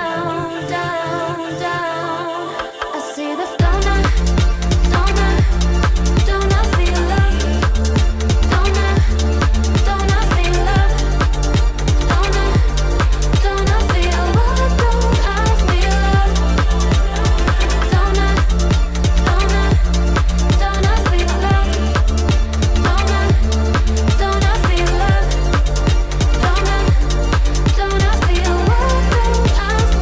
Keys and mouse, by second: 0.5 click, 1.0 click, 1.9 click, 2.5 click, 3.5 click, 4.4 click, 5.6 click, 7.1 click, 7.5 shift+click, 8.4 click, 9.6-10.6 drag, 11.0-13.0 drag, 13.5 click, 16.0 click, 16.4 g, 17.6 click, 18.1 click, 18.2 g, 19.3 click, 19.5 g, 21.5 click, 22.2 g, 23.6 click, 23.8 g, 25.7 click, 26.0 shift+click, 26.6 click, 26.8 g, 27.9 middle click, 28.7 shift+middle click, 29.3-30.0 drag.